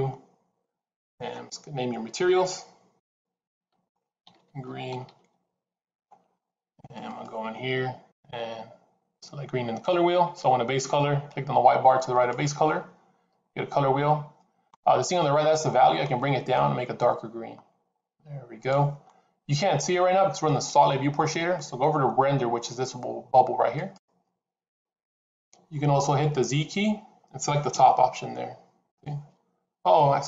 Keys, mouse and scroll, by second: 2.7 click, 5.0 e, 7.0 click, 12.0 click, 26.4 click, 27.6 z.